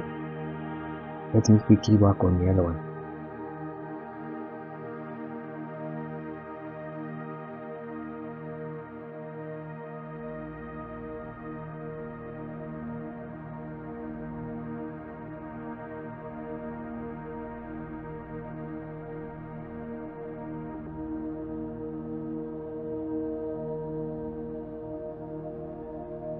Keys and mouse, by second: 0.1-0.7 middle drag, 3.8 click, 4.8-5.3 middle drag, 6.4 click, 6.7-7.1 middle drag, 8.2 shift+click, 9.3 ctrl+p, 10.8 click, 12.0 click, 13.0-13.4 drag, 13.8 click, 14.1-14.9 drag, 15.6 click, 16.2 click, 17.6 click, 17.9 click, 18.5 click, 19.2-20.3 drag, 21.1-22.0 drag, 25.1 ctrl+p.